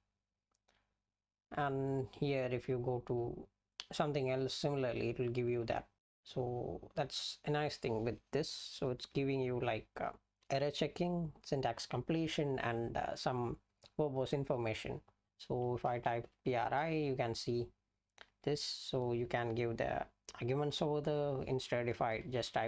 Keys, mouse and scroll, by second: 15.2-16.7 typing, 20.7-22.6 typing.